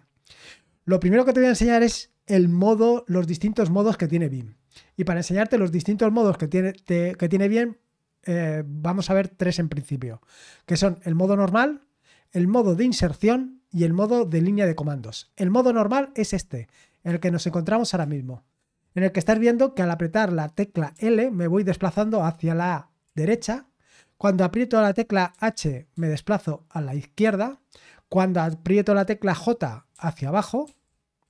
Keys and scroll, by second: 4.1-5.0 scroll down 1, 5.0-6.0 scroll down 1, 16.2-18.0 typing, 19.3 typing, 25.3-27.2 typing, 29.9-31.2 typing.